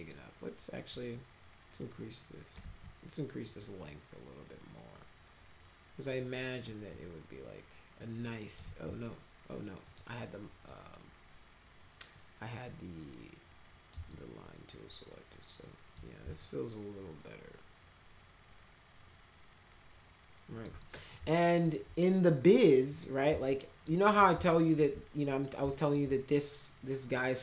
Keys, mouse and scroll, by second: 1.8 click, 2.5 ctrl+z, 3.4-6.6 drag, 7.9 click, 8.6 ctrl+z, 9.8 click, 10.6 middle click, 12.1-13.9 drag, 14.1-15.9 alt+middle drag, 16.3-20.6 alt+middle drag, 20.7 middle click, 21.1 alt+middle click, 21.3 alt+middle click, 22.8 click, 23.5 alt+middle click, 24.1 middle click, 24.4 alt+middle click, 25.6 alt+middle click, 26.1 middle click, 27.1 alt+middle click.